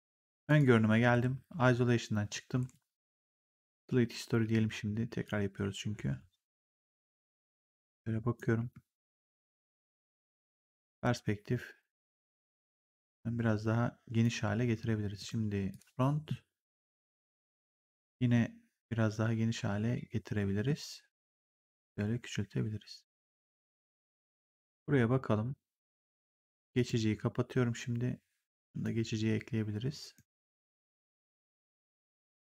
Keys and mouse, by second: 0.4 click, 1.0 ctrl+1, 2.5 g, 3.4 click, 4.3 w, 5.1 click, 8.5 r, 10.1 right click, 10.7 click, 12.6 click, 15.1 right click, 15.6 click, 17.6 r, 18.3 middle click, 21.5 click, 24.3 click, 26.7 click, 28.5 click, 29.9 right click, 30.6 click, 31.7 click, 32.0 w.